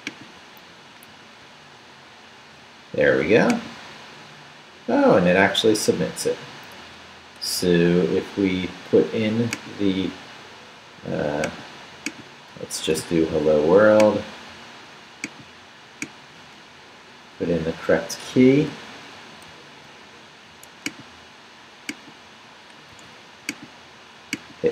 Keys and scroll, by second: 1.1 super+r, 12.8 shift+/, 13.0 shift+Return, 14.0 Return, 19.5 super+c, 22.9 super+v.